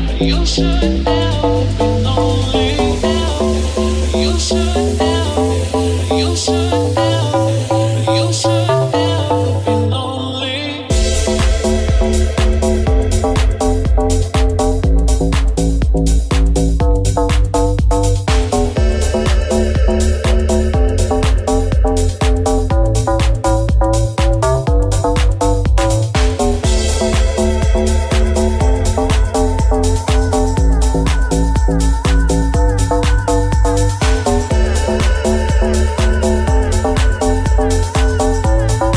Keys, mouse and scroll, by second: 0.4 g, 1.9 click, 2.0-25.6 middle drag, 2.5 g, 4.2 alt+z, 12.6 alt+z, 13.5 ctrl+KP_Add, 14.2 alt+z, 15.1 s, 25.6 alt+shift+right click, 25.7-28.9 alt+shift+middle drag, 28.9 alt+shift+right click, 29.0-33.7 alt+shift+middle drag, 33.7 alt+click, 33.9-34.9 alt+middle drag, 34.9 alt+shift+click, 35.0-38.7 alt+shift+middle drag, 35.2 alt+z, 36.4 alt+z, 38.7 right click, 38.8-38.9 middle drag.